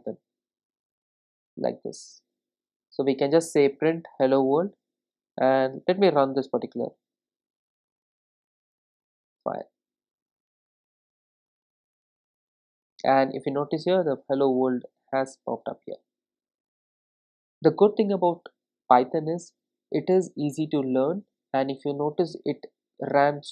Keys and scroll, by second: 11.6 ctrl+shift+r.